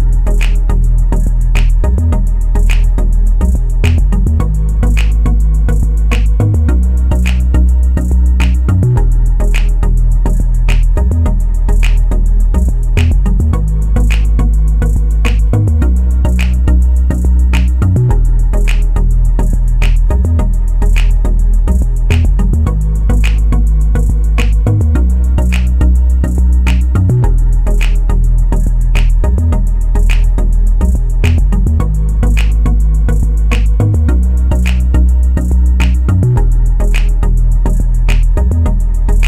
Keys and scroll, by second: 29.6 1, 29.9 0, 30.1 Return, 36.2-37.2 typing.